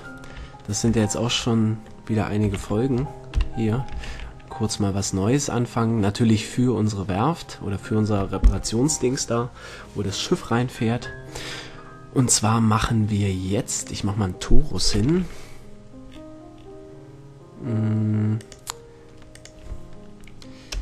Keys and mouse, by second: 3.0 shift+c, 3.7 KP_Decimal, 4.5 shift+a, 15.4 t, 18.9-20.6 drag.